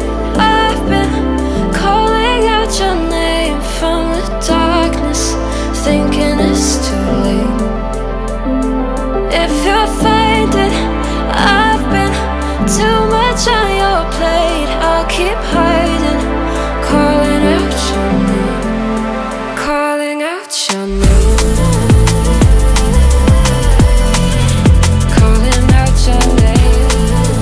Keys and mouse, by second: 0.7 click, 1.0 click, 2.0 ctrl+middle click, 2.6 click, 4.9 ctrl+middle click, 5.2 middle click, 6.2 click, 7.0 click, 9.1 shift+middle click, 9.8 shift+click, 11.7 click, 12.4 middle click, 13.3 click, 13.8 middle click, 14.5 ctrl+middle click, 16.3 click, 17.3 click, 18.1 click, 18.3 click, 19.1 click, 20.4-21.5 drag, 22.4 click, 23.8 ctrl+middle click, 24.2 middle click, 24.6 click, 25.8 ctrl+click, 26.4 click, 27.0 ctrl+middle click.